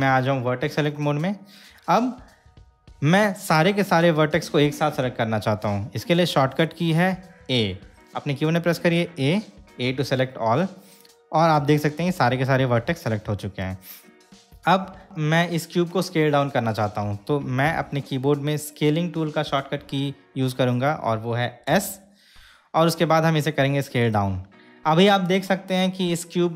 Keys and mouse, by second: 9.3 a, 12.5-13.8 shift+middle drag, 21.9 s.